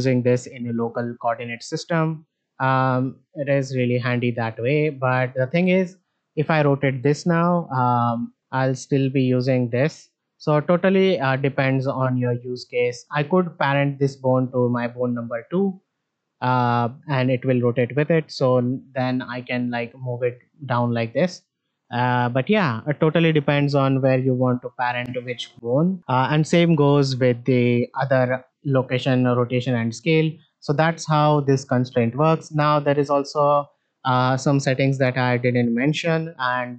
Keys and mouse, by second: 8.7 click, 9.6-13.0 drag, 14.4-15.0 drag, 18.2 click, 19.7 click, 21.6 ctrl+z, 23.9 ctrl+z, 24.3 ctrl+z, 25.5 a, 26.0 alt+g, 26.0 alt+r, 26.0-27.9 shift+middle drag, 28.2-29.6 drag, 29.9 click, 33.4 shift+middle drag.